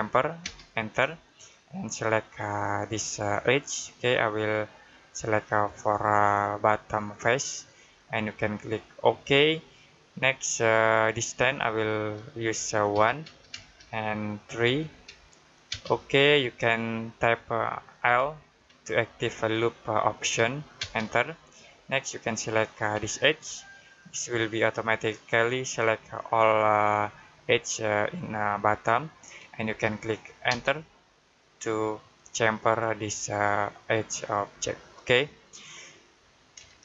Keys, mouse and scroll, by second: 0.3 space, 3.3 space, 6.4 click, 8.9 click, 12.8 1, 13.4 space, 14.5 3, 15.6 space, 20.7 space, 23.3 click, 30.3 click, 30.7 space, 36.6 middle click.